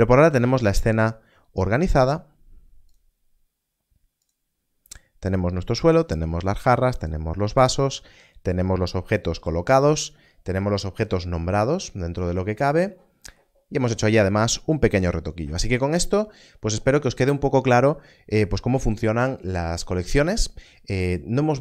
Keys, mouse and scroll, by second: 2.0-2.8 scroll up 1, 2.8 click, 11.7 click.